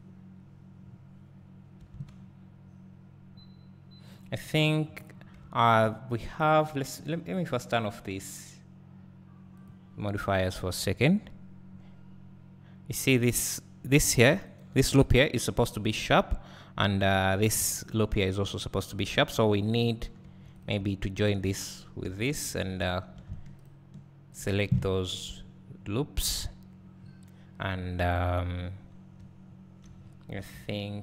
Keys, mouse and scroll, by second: 0.8 scroll up 1, 1.9 alt+a, 4.6 click, 8.2-9.6 drag, 15.1 alt+click, 20.2 1, 20.6 click, 21.2 shift+click, 22.0 j, 22.6 2, 23.6 alt+shift+click, 24.8 scroll down 1, 25.7-26.3 scroll up 2, 26.3 scroll down 2, 26.9 scroll up 2, 28.9 scroll down 1, 30.0-30.4 scroll up 1.